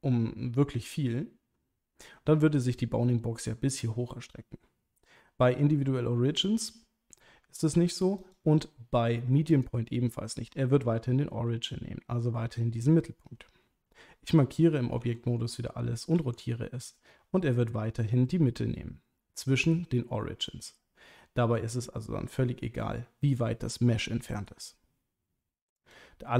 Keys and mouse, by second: 5.6 Tab, 8.3-9.6 drag, 15.0 a, 16.1 r, 19.6 right click, 21.5 r, 24.3 right click, 25.8-26.3 drag.